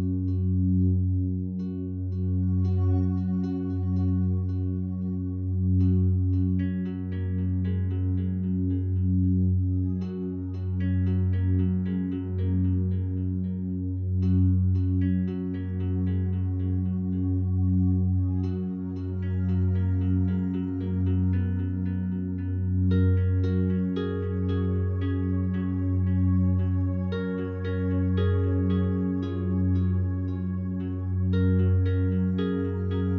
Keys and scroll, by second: 15.4 6, 15.6 Return.